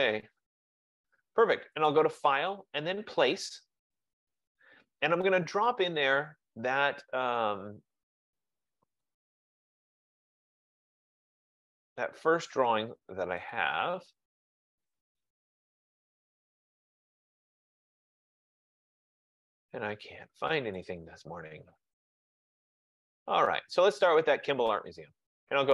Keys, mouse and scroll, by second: 2.0 click, 3.8 click, 9.2 click, 13.7 click, 13.8 click, 15.5 click, 15.7 click, 17.4 middle click, 18.9-19.8 scroll, 20.8 click, 21.0 click, 22.3 click, 22.6 click, 23.0 click, 23.3 click, 24.2 click.